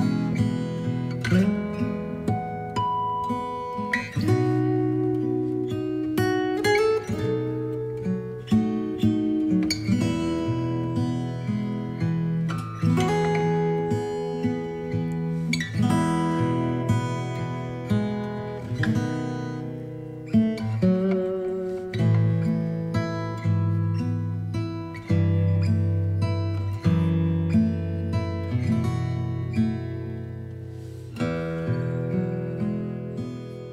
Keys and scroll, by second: 6.2 ctrl+j.